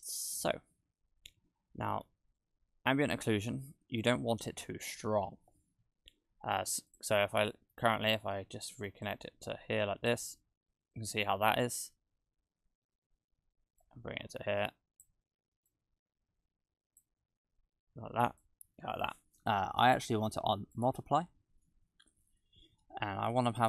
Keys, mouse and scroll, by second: 0.1-1.0 scroll up 2, 1.0-1.8 scroll down 1, 2.2-3.1 scroll down 1, 3.1 middle click, 3.1 scroll down 1, 4.4-5.1 scroll down 2, 5.1 shift+`, 7.5 middle click, 9.0 click, 10.9-12.6 scroll up 1, 13.8 click, 15.7 click, 18.3 click, 21.4-22.0 scroll up 4, 22.4-23.3 scroll up 1.